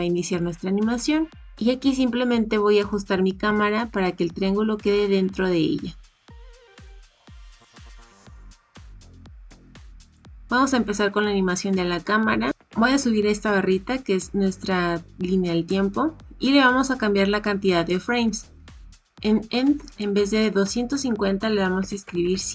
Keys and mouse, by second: 2.7 g, 12.5-13.6 drag, 13.6-15.6 right drag, 19.9-22.5 right drag, 22.2 KP_0.